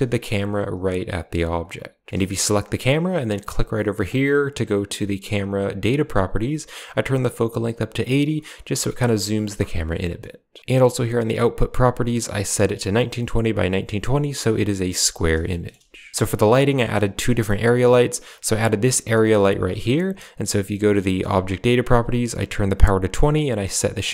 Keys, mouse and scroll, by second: 2.3 g, 4.0 click, 4.3 g, 17.0 right click, 17.4 middle click, 18.6 g, 21.1 click, 23.5 click.